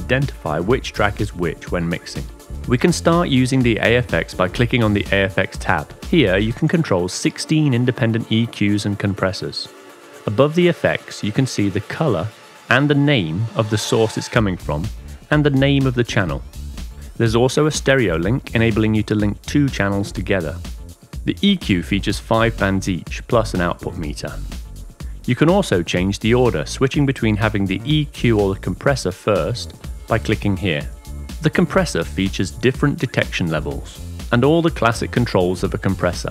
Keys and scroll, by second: 0.0-4.2 typing.